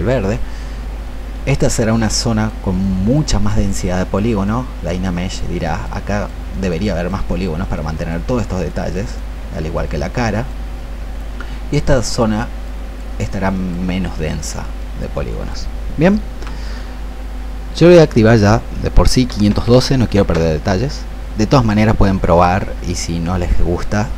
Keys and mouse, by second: 16.1 Escape, 17.8 click, 19.3 KP_5, 19.4 KP_1, 19.6 KP_2.